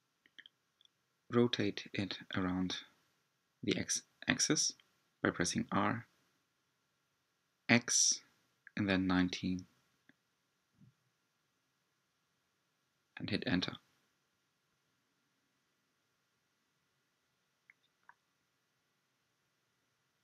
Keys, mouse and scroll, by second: 0.3 g, 3.3 click, 4.2-4.8 scroll up 6, 5.7 g, 12.9-13.5 scroll down 3, 13.5-15.8 middle drag, 15.8 g.